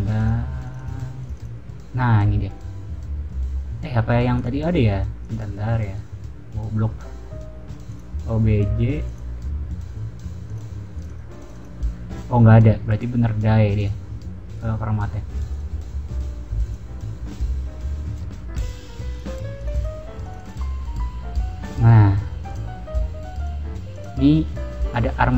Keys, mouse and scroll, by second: 0.1 click, 0.6 click, 0.7 click, 1.1 click, 1.3 click, 4.3 click, 5.1 click, 5.9 click, 7.8 click, 9.0 click, 10.4 click, 10.9 click, 11.3 click, 13.7 click, 14.5 click, 15.5 click, 16.6 click, 18.5 click, 19.0 click, 19.5 click, 20.1 click, 20.3 click, 20.8 middle click, 21.1-22.2 scroll up 1, 22.2 scroll down 1, 22.4 click, 23.3 click, 23.9 click, 24.6-25.1 scroll up 2, 25.1 scroll down 2.